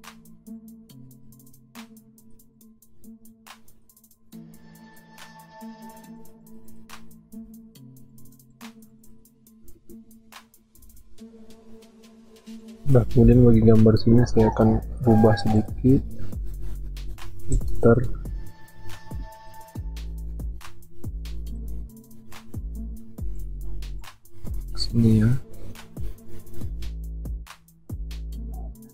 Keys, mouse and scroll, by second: 10.8 ctrl+r.